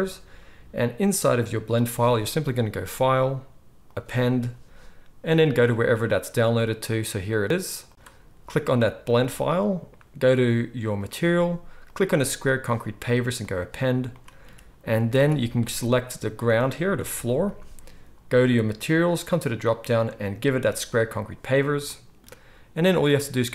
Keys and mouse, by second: 15.0 ctrl+s, 15.2 ctrl+s, 15.7-19.4 middle drag, 17.0 g, 19.4-23.5 drag.